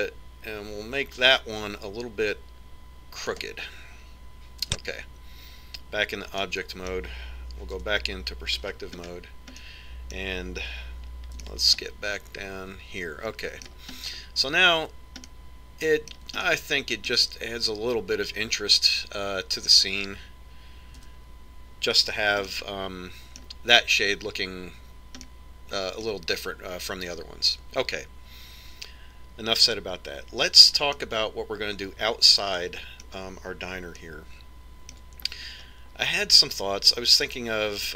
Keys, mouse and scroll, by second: 6.0 Tab, 7.8-9.5 middle drag, 9.1 KP_5, 10.0-14.5 middle drag, 15.5-16.0 scroll up 1, 16.0-16.8 scroll down 1, 16.8-19.6 middle drag, 22.5 a, 24.0-25.8 middle drag, 26.7-28.4 middle drag, 32.5-34.1 middle drag, 35.5-37.4 middle drag, 37.4 scroll up 1, 37.6-37.9 middle drag.